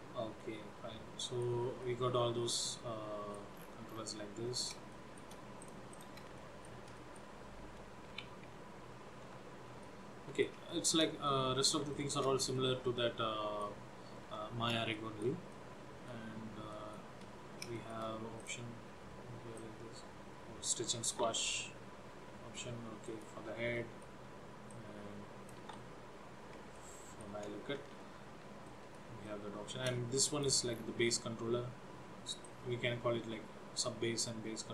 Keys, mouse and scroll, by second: 0.5 middle click, 2.0 middle click, 3.7-4.6 scroll down 8, 4.6 scroll up 2, 5.0 shift+middle click, 5.7 click, 6.0 click, 6.6 shift+middle click, 7.1 middle click, 8.3 g, 10.0 middle click, 10.8 shift+middle click, 11.4 middle click, 12.0 shift+middle click, 12.8 middle click, 15.1 middle click, 15.6 middle click, 16.8 shift+middle click, 17.3-17.7 scroll up 1, 17.9 shift+middle click, 18.5 click, 19.6 click, 21.7 ctrl+z, 23.2 click, 23.9 shift+middle click, 24.9 click, 26.2 ctrl+z, 26.8 shift+middle click, 28.7 middle click, 29.5 shift+middle click, 30.4 click, 30.9-31.5 scroll down 4, 32.6 click.